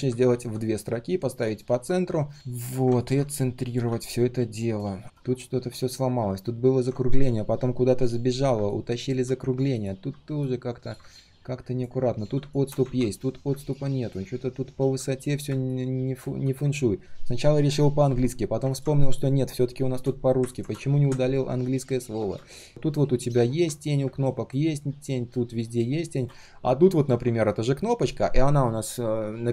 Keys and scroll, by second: 3.3 alt+v, 12.8 ctrl+z.